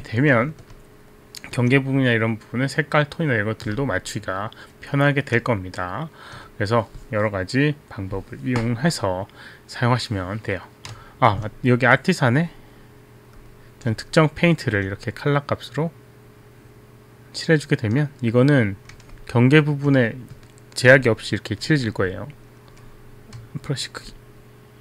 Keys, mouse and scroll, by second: 0.9 alt+click, 1.5 alt+click, 3.9 alt+click, 5.7 alt+click, 12.5-12.9 drag, 13.5 click, 14.2 click, 14.8 alt+right click, 17.4 right click, 18.2 click, 18.6 click, 19.1 alt+a, 19.3 alt+click, 21.5 b, 21.7 right click, 22.5 right click, 22.5 b, 22.9 right click, 23.4 b, 24.5 click.